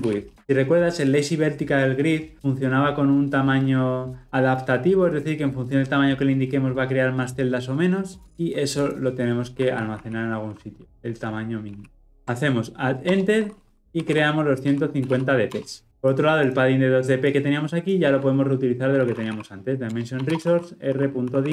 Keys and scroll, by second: 12.1 alt+Return, 19.9 Return.